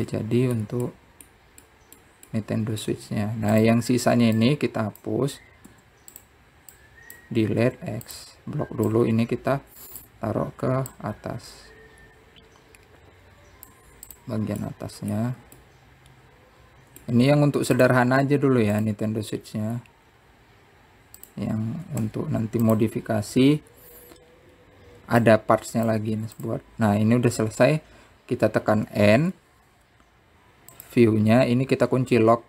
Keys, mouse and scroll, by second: 0.8-1.1 scroll down 2, 1.1 click, 1.8-4.7 middle drag, 6.2 click, 7.4 x, 8.5 click, 9.4 x, 10.7-12.7 drag, 15.8 click, 16.4-19.1 middle drag, 21.8-22.9 scroll up 4, 22.9 click, 25.8 scroll down 2, 27.0-28.3 drag, 30.7 n.